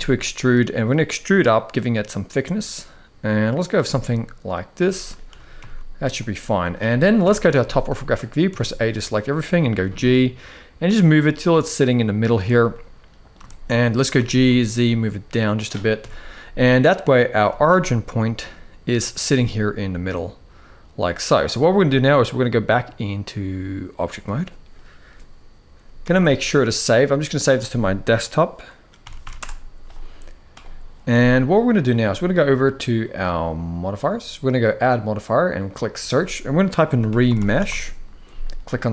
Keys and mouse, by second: 3.5 middle click, 4.6 shift+middle click, 5.0 g, 6.9 KP_7, 7.7 shift+middle click, 8.2 a, 8.7 shift+middle click, 9.5 g, 12.4 middle click, 13.2 shift+middle click, 13.9 g, 15.7 KP_1, 17.1 g, 19.0-21.0 middle drag, 22.0-24.0 drag, 25.8 ctrl+s, 31.2 middle click, 33.7 click, 34.3-38.8 drag.